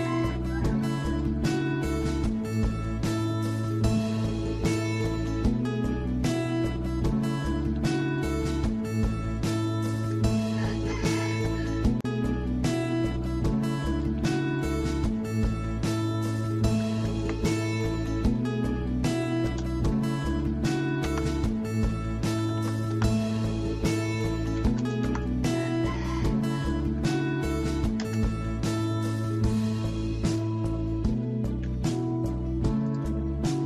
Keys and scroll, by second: 0.0-0.6 typing, 6.3 Escape, 7.8 Escape, 8.6 Escape, 10.7-11.6 typing, 14.2 Escape, 16.4 typing, 19.0-19.7 typing, 21.0 Return, 22.2-25.1 typing, 26.8-29.8 typing, 31.6 m.